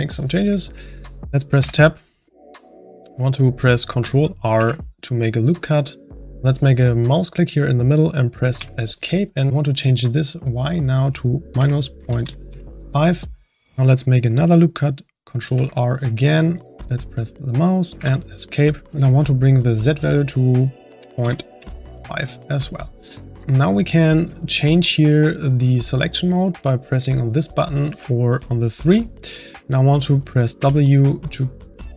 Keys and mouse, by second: 1.6 Tab, 4.5 ctrl+r, 9.5-13.8 drag, 15.4 ctrl+r, 18.8-23.2 drag, 23.2-26.7 middle drag, 27.2-30.9 drag, 30.9 w.